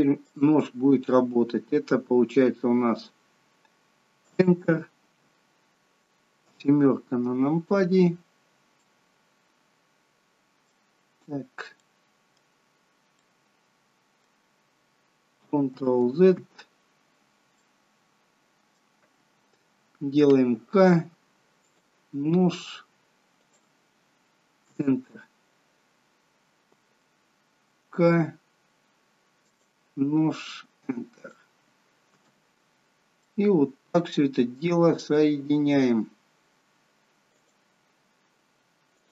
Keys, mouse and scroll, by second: 6.3 KP_7, 8.8 middle click, 10.9-11.3 scroll up 6, 11.7 middle click, 12.7 scroll down 2, 13.1 middle click, 15.6 ctrl+z, 17.4 middle click, 20.2 k, 25.9 scroll down 1, 27.8 k, 32.6-33.0 scroll down 4, 33.2 middle click, 34.0-34.6 scroll up 3, 36.6 k.